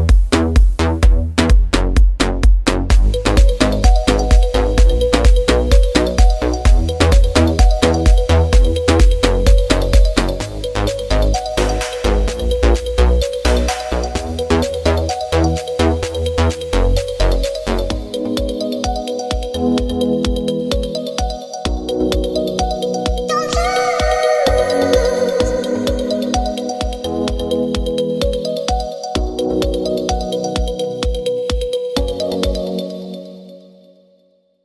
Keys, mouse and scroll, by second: 0.1 ctrl+d, 5.6 click, 16.1-20.4 middle drag, 20.4 shift+d, 21.9 alt+d, 23.4 ctrl+d, 28.9-33.8 middle drag, 33.8 click.